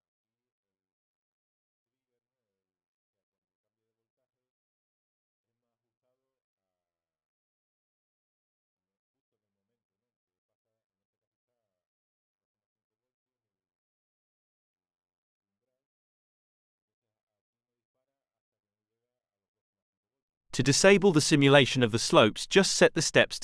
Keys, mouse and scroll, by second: 12.1 click, 15.6 click, 22.8 click.